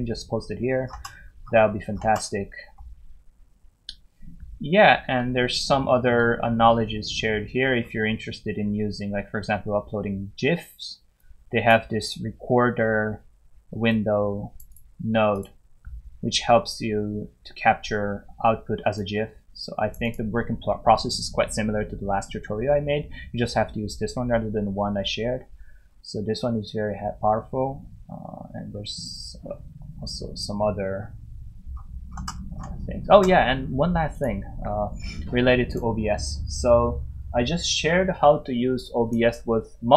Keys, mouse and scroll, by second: 0.9 scroll down 1, 5.1 scroll down 1, 7.1 scroll down 1, 11.1-11.5 scroll down 1, 11.5 click, 14.7 double click, 15.3 click, 18.9 click, 20.0 double click, 25.8 double click, 26.0 scroll down 1, 27.2 scroll down 1, 28.1 scroll down 1, 28.7 scroll down 1, 29.6 scroll down 1, 31.7 scroll up 1, 32.2 scroll up 1, 34.1 click.